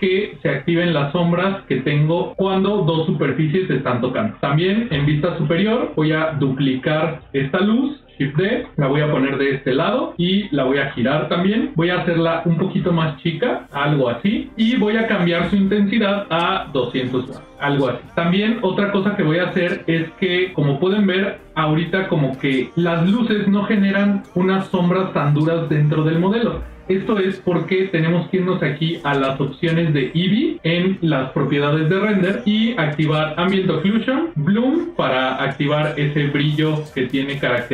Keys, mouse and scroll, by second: 0.1 ctrl+middle click, 4.3 ctrl+middle click, 4.8 KP_7, 5.8 ctrl+middle click, 6.2 shift+middle click, 8.3 shift+d, 10.7 r, 16.2-17.4 drag, 17.4 KP_0, 18.8 middle click, 20.0 click, 20.4 ctrl+middle click, 21.4 shift+middle click, 28.6 click, 34.2 click, 34.4 click.